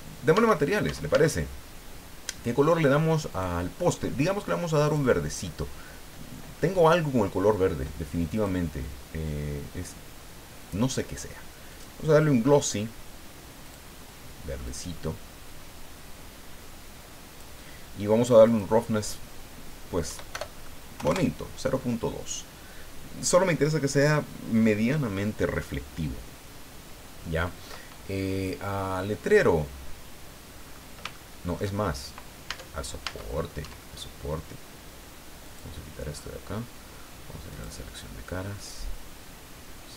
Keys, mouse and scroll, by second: 3.3 click, 4.8 click, 8.3 click, 11.7 click, 13.6 click, 14.6-17.6 drag, 18.4 click, 20.1 Right, 20.3 BackSpace, 21.0 KP_2, 21.1 KP_Enter, 30.5-31.0 scroll up 2, 31.1 shift+middle click, 32.5 Tab, 35.4 click, 36.1 scroll up 1, 37.5 click.